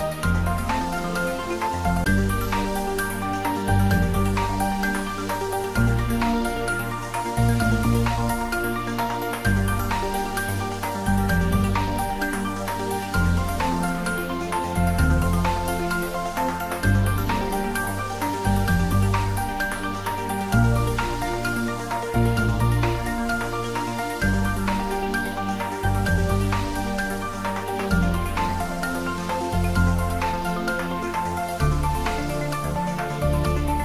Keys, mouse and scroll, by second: 1.4-3.4 scroll down 1, 3.6-4.1 scroll down 2, 5.5-7.0 middle drag, 7.0-9.6 scroll up 1, 9.6-13.0 drag, 13.0-14.6 scroll up 1, 14.6 click, 16.7 3, 17.5-20.9 scroll up 1, 20.9-22.3 middle drag, 22.3-25.3 scroll down 1, 25.5-25.8 scroll up 1, 26.7-29.1 middle drag, 29.1 click, 30.4 h.